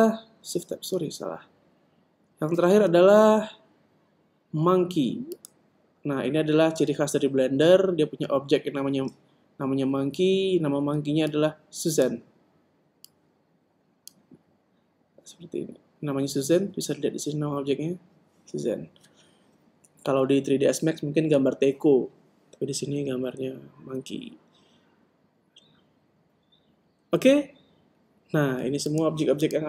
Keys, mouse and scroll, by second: 1.2 shift+Tab, 3.2 shift+a, 12.0-15.6 drag.